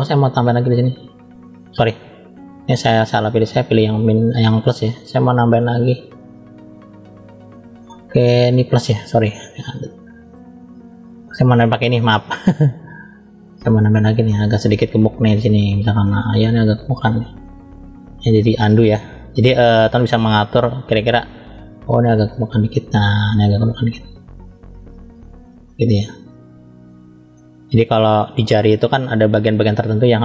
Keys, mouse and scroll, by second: 0.3 click, 2.2 click, 3.5 click, 4.8 click, 9.7-10.3 drag, 11.3 click, 12.5 click, 14.4 middle click, 15.4 click, 18.5 click, 20.2 middle click, 21.3 click, 23.0 middle click, 24.3 click, 25.4 middle click, 26.2-27.2 drag, 27.2-28.9 middle drag.